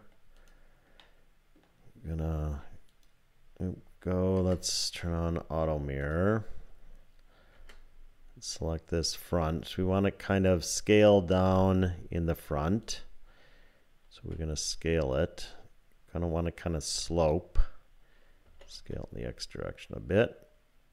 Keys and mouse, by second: 0.4 click, 1.0 click, 1.3 middle click, 4.4 Tab, 6.0 click, 7.6 Tab, 9.1 click, 11.4 3, 12.8 click, 14.2 s, 18.5 s.